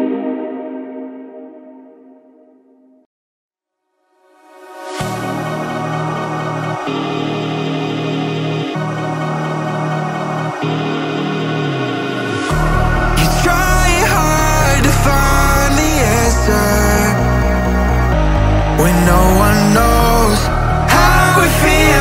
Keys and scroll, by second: 6.6 ctrl+shift+[, 7.2 ctrl+].